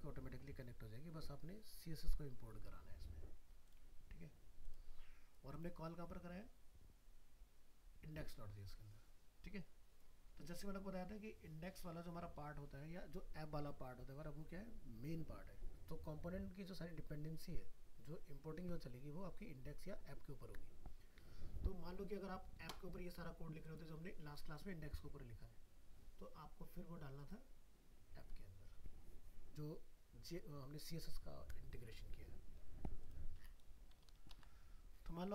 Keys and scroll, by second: 34.1 ctrl+s, 34.3 ctrl+w.